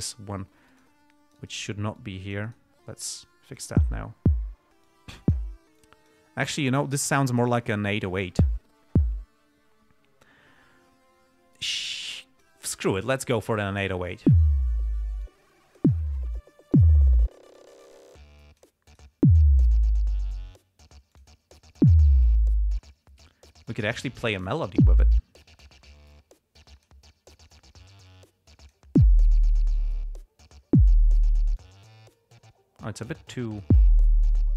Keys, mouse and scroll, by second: 1.0 right click, 1.5 right click, 2.3-3.1 drag, 2.8 right click, 3.5 click, 5.2-5.9 drag, 6.2-6.6 drag, 12.0-13.0 drag, 15.6-16.3 drag, 16.7-17.3 drag, 17.9-19.1 drag, 19.2 right click, 21.5 click, 24.4-25.2 drag, 25.5-26.2 drag, 26.5-27.4 drag, 27.9 click, 31.9-32.4 drag, 32.5-33.4 drag, 33.5-34.2 drag.